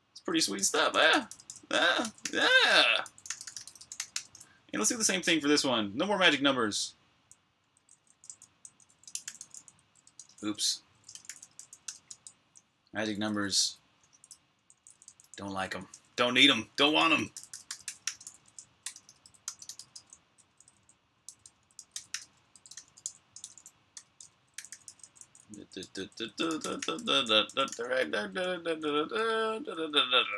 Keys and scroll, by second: 0.0-7.1 typing, 23.0-29.1 typing.